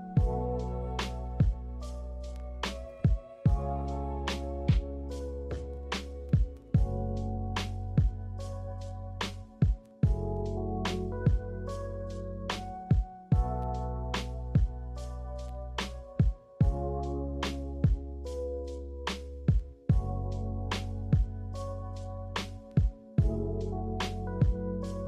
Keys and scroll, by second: 10.4 Delete, 11.2 b, 13.5 a, 19.4 z, 23.7 ctrl+z, 23.9 ctrl+z, 24.1 ctrl+z.